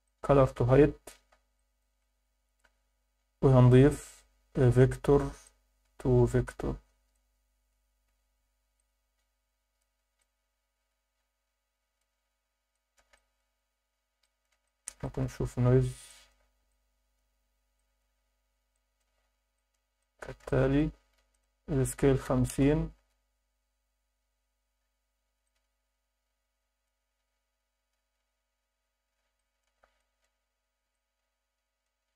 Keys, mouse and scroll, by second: 0.0-1.1 drag, 1.5 alt+shift+middle click, 3.9 alt+shift+middle click, 5.4-8.1 drag, 8.8-9.8 drag, 10.2-12.0 drag, 12.7 alt+shift+middle click, 13.1 ctrl+alt+middle click, 14.2 alt+shift+middle click, 14.6 ctrl+middle click, 15.0 alt+shift+middle click, 16.1 alt+shift+middle click, 16.7 click, 17.8 click, 18.7 alt+shift+middle drag, 19.6 alt+shift+middle click, 20.0 alt+shift+middle click, 20.5 ctrl+alt+middle click, 21.3 click, 25.4-26.9 drag, 28.9 scroll down 2, 29.4 alt+shift+middle click, 29.9 alt+shift+middle click, 30.9 click.